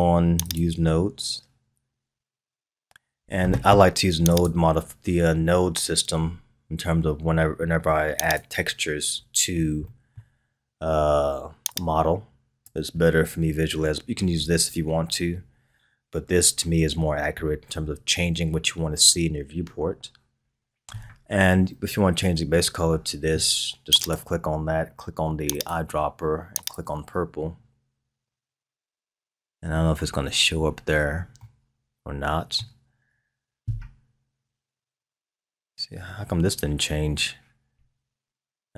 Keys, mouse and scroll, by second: 0.5 click, 4.3-7.4 drag, 9.2-9.9 scroll up 4, 9.9-11.7 middle drag, 11.7-13.0 drag, 13.0-14.3 scroll up 3, 14.3-16.9 scroll down 3, 16.9-17.9 scroll up 8, 19.8-20.5 scroll up 3, 20.5-23.2 scroll up 3, 24.0 click, 31.4-34.4 middle drag.